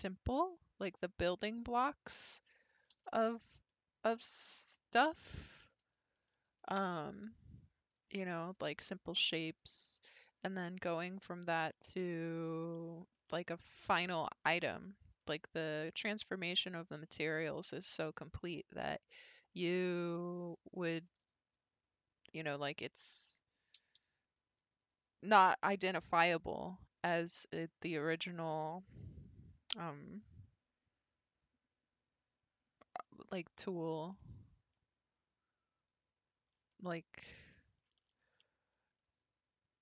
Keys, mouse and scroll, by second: 0.1-0.6 scroll up 3, 1.2 click, 1.7-2.9 middle drag, 2.9 g, 6.2-6.6 scroll down 7, 6.6-8.2 shift+middle drag, 8.2-8.5 scroll up 4, 8.5-11.2 shift+middle drag, 11.2-11.7 scroll down 3, 11.7-14.2 middle drag, 14.2-14.6 scroll up 4, 14.6-15.7 shift+middle drag, 15.7 scroll up 1, 16.2 scroll down 3, 16.6-17.0 middle drag, 17.0-17.4 ctrl+scroll up 1, 17.4 ctrl+r, 18.7 scroll up 2, 19.5 click, 20.0-20.9 middle drag, 20.9 g, 23.3 click, 23.8 g, 33.0-33.9 scroll up 3, 34.2-38.2 shift+middle drag, 38.2 ctrl+r.